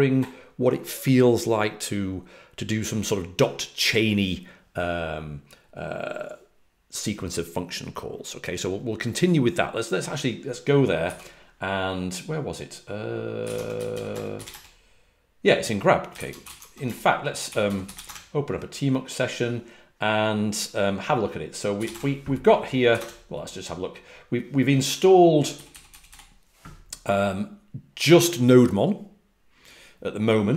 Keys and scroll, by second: 11.0 typing, 13.1-18.4 typing, 21.5-22.8 typing, 25.5-26.0 typing.